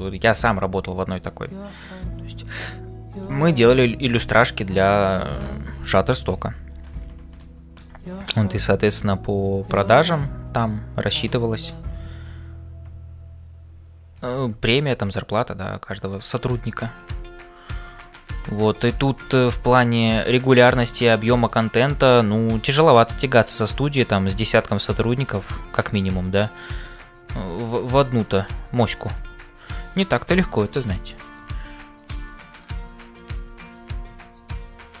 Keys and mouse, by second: 0.0-35.0 typing, 1.6 click, 2.4 click, 5.1 click, 7.3 middle click, 8.0 shift+middle click, 8.4-10.8 middle drag, 21.5 right click, 27.9 shift+right click.